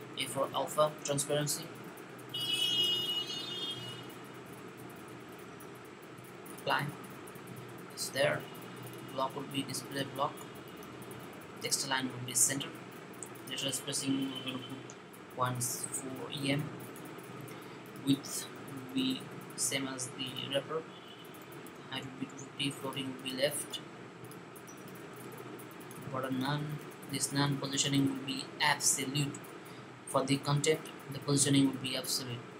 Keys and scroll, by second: 0.1 Left, 1.9-5.0 typing, 14.1-14.5 typing, 18.3-19.4 typing, 20.7-22.0 typing.